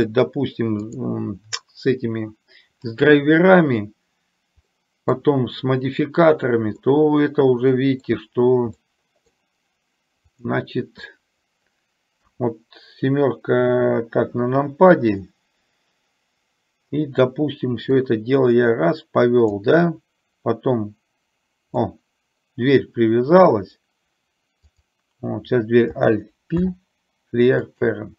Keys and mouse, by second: 1.0 click, 4.8 middle click, 6.9-8.1 middle drag, 8.9-9.3 middle drag, 10.4 click, 18.0-19.5 drag, 22.0-23.5 middle drag, 24.8 click.